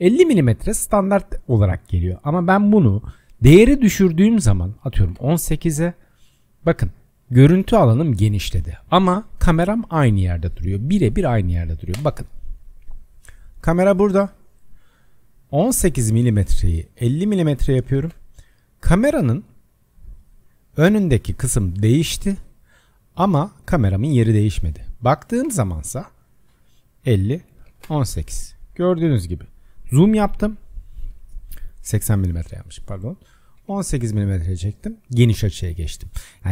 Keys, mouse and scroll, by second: 12.0 KP_0, 12.8-13.5 scroll down 6, 13.5-15.6 middle drag, 15.6-17.1 scroll up 2, 17.1-20.1 drag, 25.0 click, 25.5 KP_0, 27.0-32.2 drag.